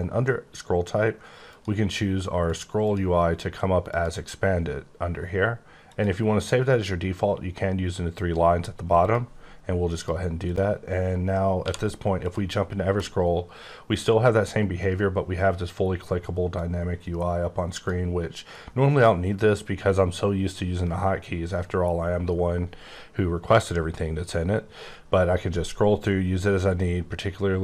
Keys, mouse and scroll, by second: 1.5 click, 2.4 click, 2.8 click, 3.9 click, 5.8 click, 9.0 click, 10.4 click, 11.6 q, 12.2 click, 13.2-14.6 scroll up 14, 14.7 scroll down 8, 16.5 click, 21.3-21.6 scroll up 8, 21.9-22.9 scroll down 7, 22.9-23.6 scroll down 3, 23.6-24.3 scroll up 3, 24.7-26.1 scroll up 11, 26.1-27.0 scroll down 6, 27.0-27.3 scroll up 1, 27.3-27.6 scroll down 1.